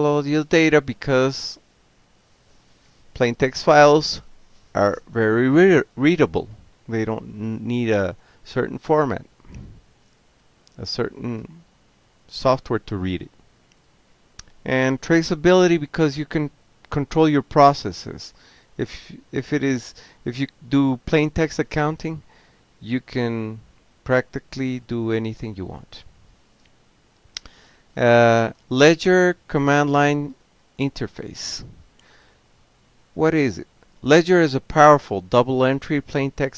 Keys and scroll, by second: 0.0-2.9 typing, 3.2 Return, 3.7 Tab, 4.1-7.1 typing, 8.8 ctrl+alt+v, 12.3 ctrl+x, 12.5 o, 13.9 Page_Up, 14.6 Down, 14.8 Down, 14.9 Down, 16.4 ctrl+x, 16.6 o, 18.3-19.8 typing, 20.3 Return, 20.9-21.8 typing, 22.1 alt+q, 25.8 Up, 25.9 Up, 26.2 Return, 26.4 Return, 26.6 Up, 26.8-28.2 typing, 30.9 space, 31.2 shift+a, 31.5 Tab, 32.2 Left, 32.3 Left, 32.4-32.8 Left, 33.1 BackSpace, 33.5 Down, 33.6 Left, 34.6-36.5 typing.